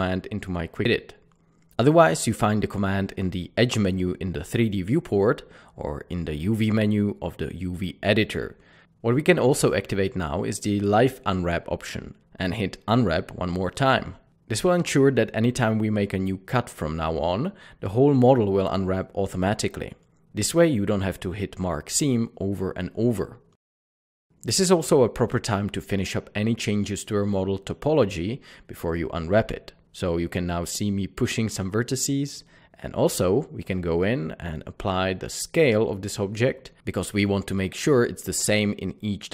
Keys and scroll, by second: 0.8 typing, 9.8 typing, 13.5 typing, 25.7 Tab, 26.5 Tab, 30.4 typing, 31.5 typing, 32.8 Tab, 34.3 Tab, 34.8 ctrl+a.